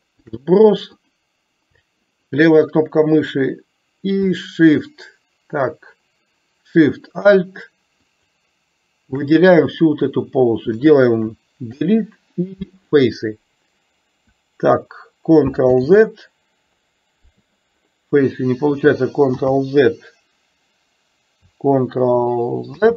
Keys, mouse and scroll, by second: 0.3 shift+click, 1.1 click, 8.2 shift+click, 11.8 Delete, 15.8 ctrl+z, 19.6 ctrl+z, 22.8 ctrl+z.